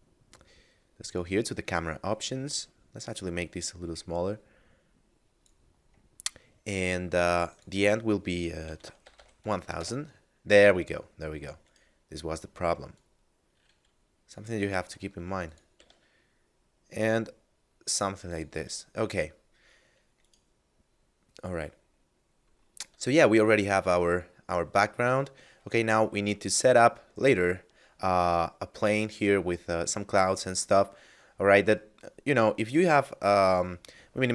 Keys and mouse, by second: 1.1 click, 7.5 click, 8.7 1, 8.7 0, 9.8 Return, 11.7 right click, 13.0 click, 14.9 r, 15.5 click, 15.6 g, 15.8 z, 18.3 click, 18.5 a, 20.1 right click, 22.8 a, 23.5 right click, 23.9 a, 25.8 middle click.